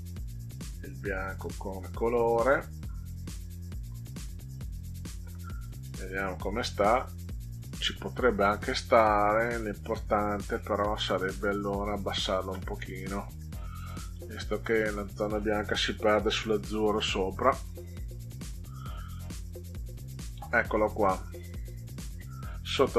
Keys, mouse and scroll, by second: 0.1 click, 1.4 click, 3.8 scroll down 2, 4.6 click, 5.8 click, 9.5 ctrl+scroll down 2, 10.5-11.0 middle drag, 14.0 click, 16.6 Down, 17.0 Down, 21.9 ctrl+middle click.